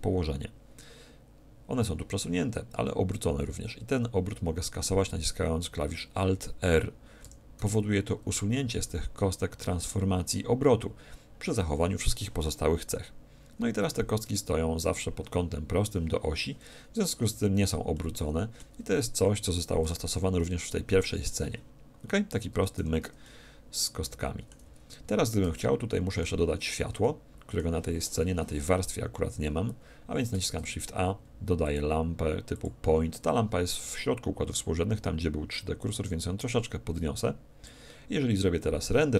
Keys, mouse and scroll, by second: 7.2 alt+r, 17.2 z, 17.9-19.7 middle drag, 18.7 a, 19.8 2, 20.3-22.1 middle drag, 22.5 2, 22.7 3, 23.2 middle click, 24.6 z, 25.0 z, 25.2 middle click, 27.4-29.0 middle drag, 35.7-37.6 drag.